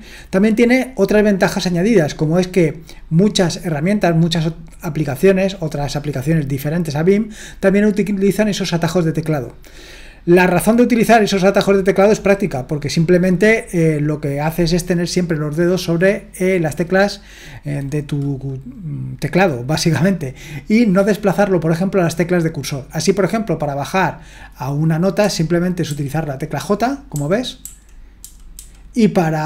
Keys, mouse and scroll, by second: 25.2-25.8 typing, 27.1-29.4 typing.